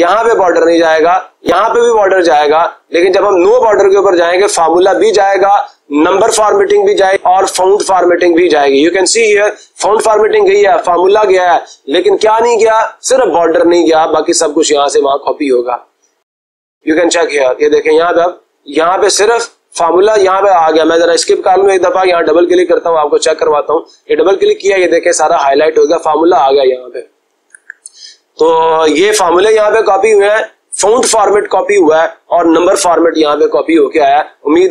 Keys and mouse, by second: 16.9-18.1 drag, 19.4-20.5 drag, 21.2 Escape, 22.0 click, 22.2 click, 23.5 click, 23.6 click, 27.5 Escape.